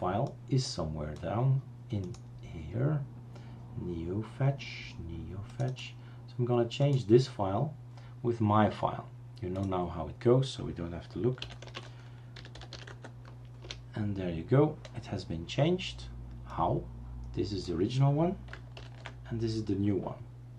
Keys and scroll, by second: 11.5-13.2 typing, 13.6 Return, 18.9 ctrl+alt+t.